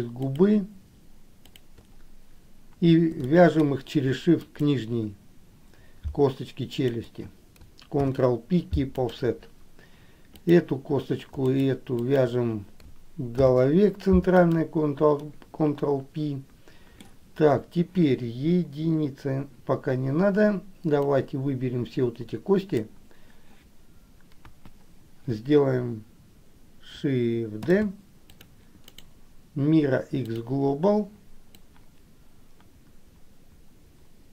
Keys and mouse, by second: 0.5 shift+click, 3.5 middle click, 4.8 shift+click, 6.9 shift+click, 8.2 ctrl+p, 10.6 click, 12.1 shift+click, 13.6 ctrl+p, 15.3-17.2 middle drag, 21.3-23.1 drag, 24.6 KP_1, 27.7 shift+d, 29.1-30.6 right drag, 31.8-34.3 drag.